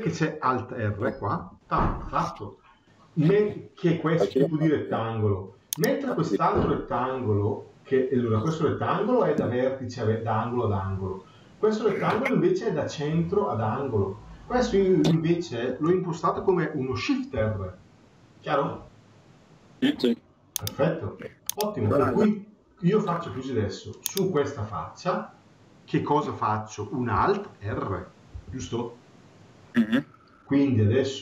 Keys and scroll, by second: 1.3 alt+r, 28.2 alt+r.